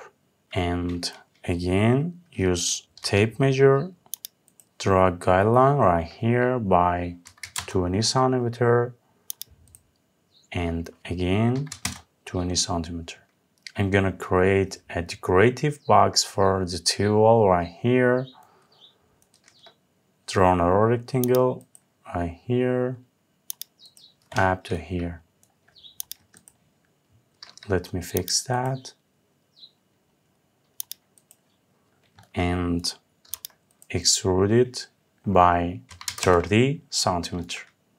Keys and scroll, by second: 7.2 Return, 11.4 Return, 35.8 Return.